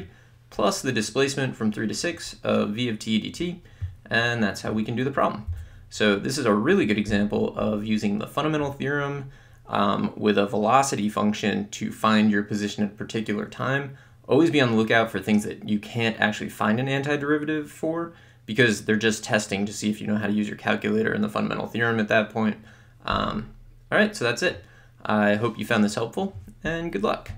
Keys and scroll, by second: 5.5 BackSpace.